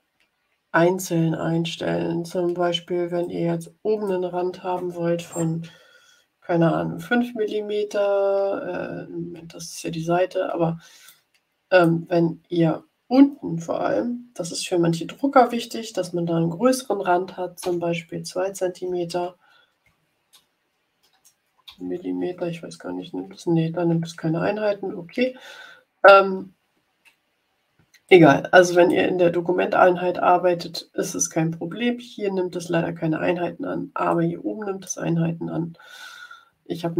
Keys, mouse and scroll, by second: 3.1-4.2 drag, 6.9 5, 11.0 click, 17.5 2, 18.8 0, 21.6 m, 28.0-29.0 drag, 34.0 click.